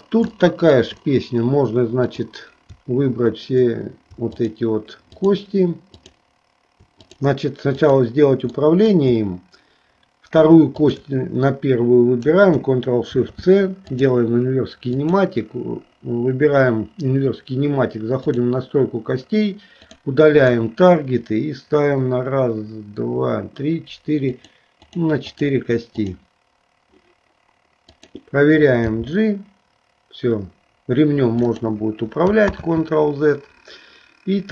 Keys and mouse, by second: 0.4 shift+middle click, 4.3 shift+click, 5.3 shift+click, 6.1 shift+click, 7.2 click, 8.0 click, 8.7 middle click, 14.1 ctrl+shift+c, 15.0 click, 18.3 click, 19.8 click, 20.6 click, 24.4 click, 25.0 click, 25.5 click, 26.2 click, 27.9 click, 29.1 g, 32.7 ctrl+z.